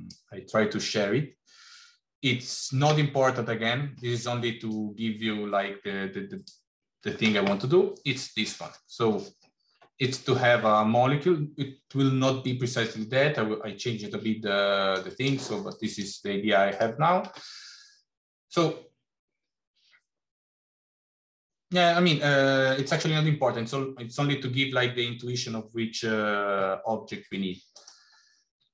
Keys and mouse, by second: 27.7 click, 28.5 g.